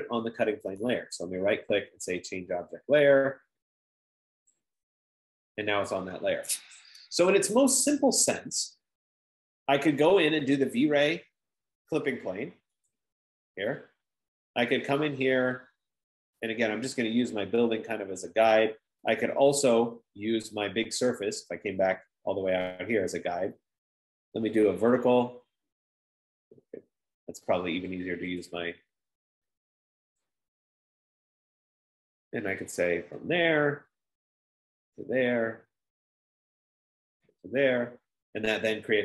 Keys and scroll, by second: 0.8 typing, 1.8 typing, 7.8 Escape.